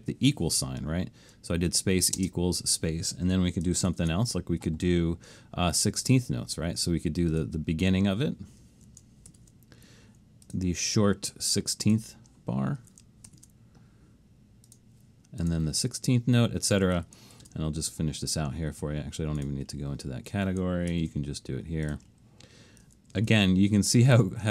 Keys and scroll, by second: 2.2 space, 3.9 alt+shift+super+s, 9.3 alt+shift+super+s, 13.3 alt+shift+super+s, 17.4 alt+shift+super+s, 20.9 alt+shift+super+s, 23.3 alt+shift+super+s.